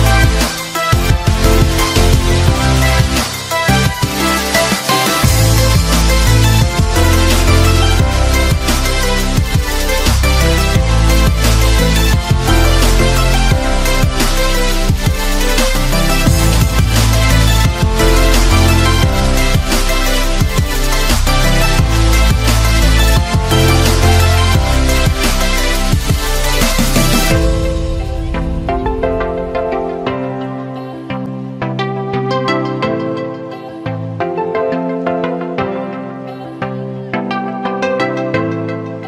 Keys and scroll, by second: 1.3 ctrl+alt+z, 6.5 ctrl+t, 9.3 Return.